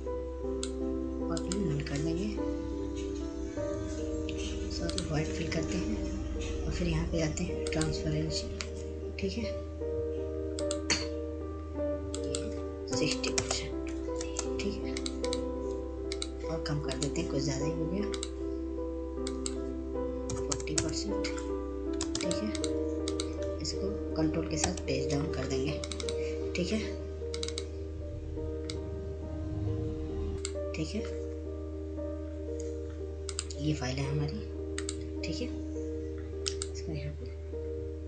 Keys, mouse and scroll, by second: 1.5-6.1 drag, 6.1 right click, 9.8 click, 12.6 click, 15.6-19.3 drag, 19.3 ctrl+space, 20.0-27.2 drag, 27.2 ctrl+space, 27.4 click, 29.9 ctrl+Page_Down, 30.3 click, 31.3 click, 34.3 click, 36.6 click.